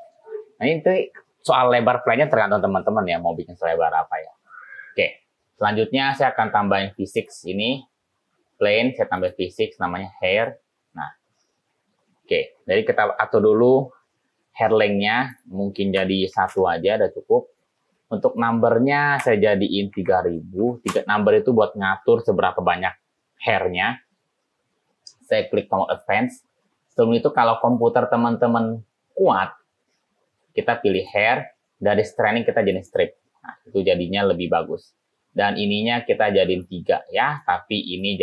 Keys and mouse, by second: 6.0 click, 7.2 click, 10.4 click, 15.4-17.9 drag, 18.7-24.6 drag, 20.4 0, 26.0 click, 27.8 click, 31.0 click, 32.8 click, 36.6 click, 37.3 click.